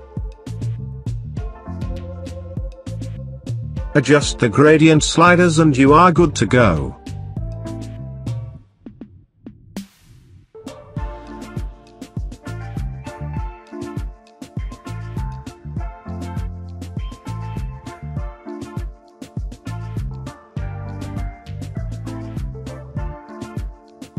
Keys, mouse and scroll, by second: 2.1 click, 2.2-24.1 drag.